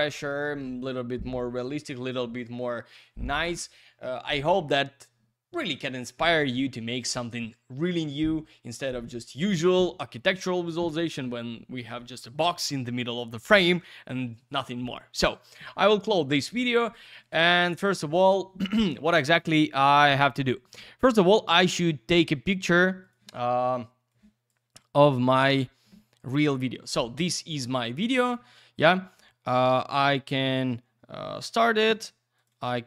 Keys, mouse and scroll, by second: 15.5 click, 16.6 click, 16.8 click, 17.0 click, 17.1 double click, 17.2 click, 17.4 click, 17.5 double click, 17.6 click, 17.8 click, 17.9 double click, 18.0 click, 23.3 click, 24.1 click, 25.3 click, 25.5 double click, 26.2 click, 26.3 click, 26.5 double click, 31.8 space, 32.3 click, 32.5 click, 32.6 double click.